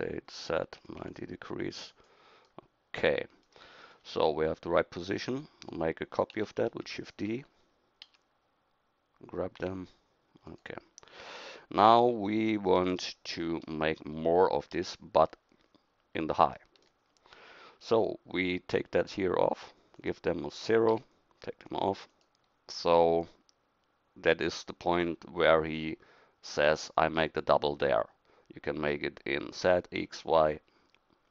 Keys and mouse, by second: 2.5-5.7 middle drag, 6.7 shift+d, 8.0 d, 9.6 g, 13.7 KP_1, 14.6-16.6 middle drag.